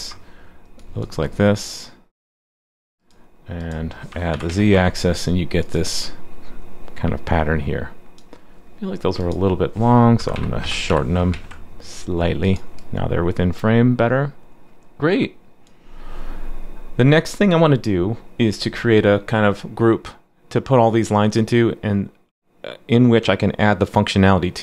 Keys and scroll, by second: 4.3 super+/, 4.5 super+s, 11.3 super+s.